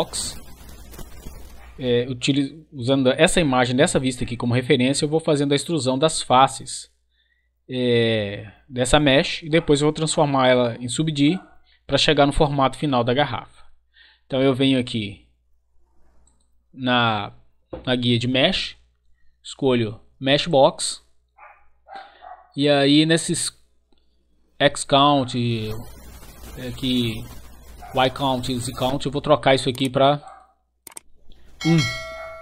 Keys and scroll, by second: 31.7 1, 32.2 Return.